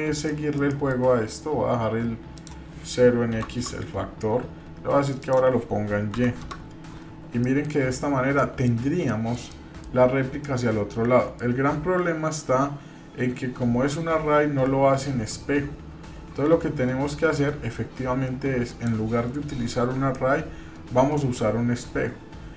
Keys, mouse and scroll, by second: 0.3 middle click, 0.6 scroll down 1, 2.3-4.4 drag, 5.2-6.9 drag, 7.4-7.7 middle drag, 7.8-8.3 scroll up 3, 8.3 middle click, 9.0 shift+middle click, 10.5-11.5 middle drag, 18.7 click, 20.1-22.5 middle drag.